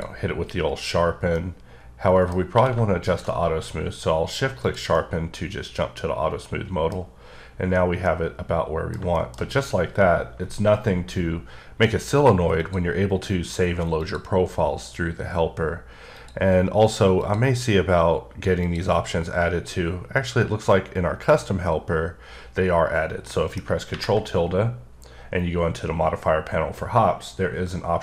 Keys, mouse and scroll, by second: 1.4 middle click, 2.6 q, 3.1 shift+click, 3.8-4.7 scroll down 3, 4.7 click, 5.0 middle click, 8.1 middle click, 12.6 click, 14.1 click, 16.2 click, 17.3 click, 18.7 click, 23.3 click, 23.4 middle click.